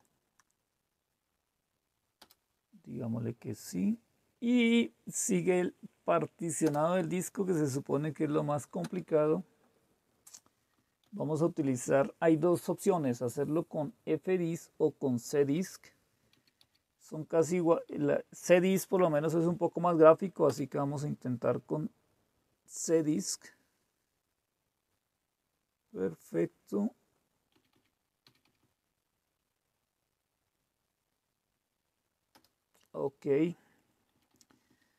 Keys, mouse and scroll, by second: 2.2 Return, 6.7 Return, 8.8 Return, 10.8 End, 10.9 Down, 11.0 Home, 14.9 End, 15.1 Down, 15.4 Up, 16.3 Down, 16.5 Up, 17.4 Down, 17.8 Up, 20.5 Return, 27.6 Down, 27.7 Down, 28.2 Down, 28.4 Down, 28.5-29.3 Down, 32.4 Return, 34.2 Down, 34.2 Down, 34.4 Down, 34.6 Down.